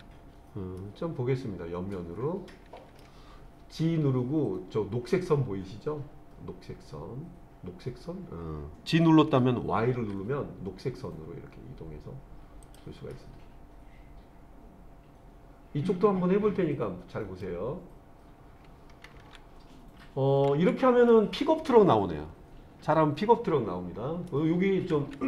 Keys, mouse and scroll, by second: 0.8-3.0 middle drag, 3.8 g, 10.0 y, 12.7 click, 13.1-17.5 middle drag, 21.1-24.3 middle drag.